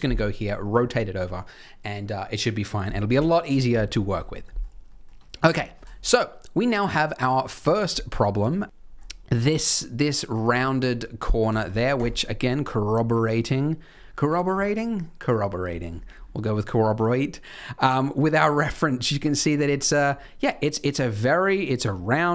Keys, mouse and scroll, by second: 3.1 KP_3, 3.8-4.2 scroll up 4, 4.4 shift+middle click, 5.1 shift+middle click, 8.1-9.9 scroll up 7, 8.6 click, 10.8-11.4 scroll down 1, 11.4-12.0 scroll down 1.